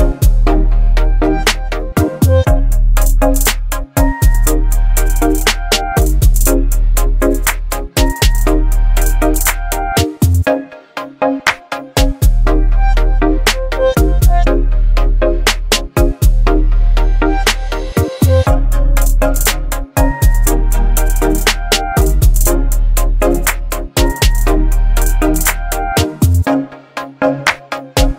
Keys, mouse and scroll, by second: 1.4-3.0 drag, 6.6-7.5 drag, 13.6 right click, 14.6-18.9 drag, 20.7 ctrl+g, 22.6 click, 27.2 click, 27.4 click.